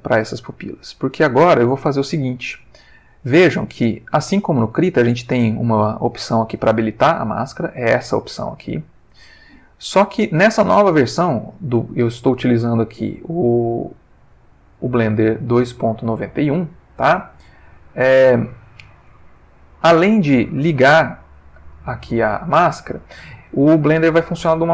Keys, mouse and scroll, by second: 0.5 ctrl+middle click, 6.6 click, 7.4 click, 8.0 click, 8.5 click, 9.3 click, 13.2 click, 14.3 click, 17.6 click.